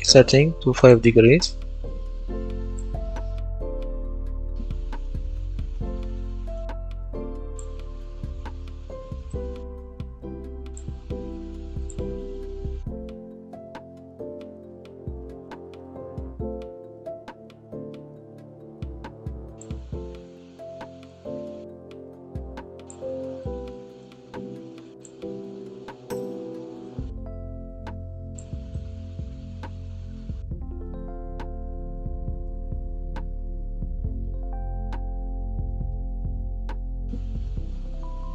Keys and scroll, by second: 2.8-4.3 typing, 5.3-6.5 typing, 12.5 KP_0, 12.6 Return, 13.7-17.5 typing, 23.1 d, 28.6-31.4 typing, 32.5-37.0 typing.